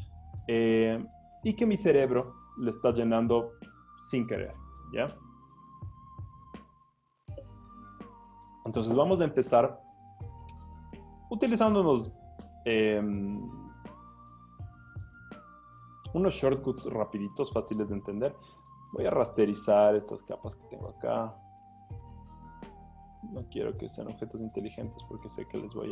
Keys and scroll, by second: 17.8 Escape.